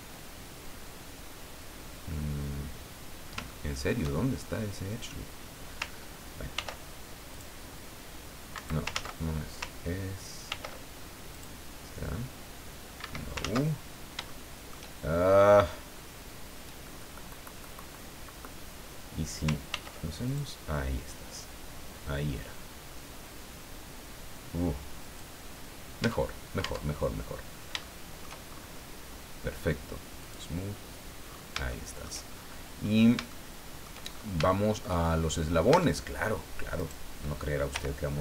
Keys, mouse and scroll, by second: 3.5 shift+middle click, 4.0 shift+scroll up 1, 4.2 shift+scroll down 1, 6.5 ctrl+r, 7.3 click, 8.5 Escape, 8.9 ctrl+z, 10.5 ctrl+r, 11.3 click, 13.0 Escape, 14.3 shift+middle click, 19.7 ctrl+r, 20.3 ctrl+click, 25.0 click, 25.6-25.9 scroll down 2, 26.0 Tab, 27.2-27.6 scroll down 2, 27.8 shift+middle click, 28.5-28.8 shift+scroll up 3, 30.2 click, 31.2-31.6 scroll down 1, 31.7 shift+middle click, 32.3-32.7 shift+scroll up 1, 32.8 scroll down 1, 33.3 shift+middle click, 34.1 shift+scroll up 1, 34.4 shift+middle click, 35.1-35.5 shift+scroll up 1, 35.7 Tab, 36.7 right click, 37.7 l.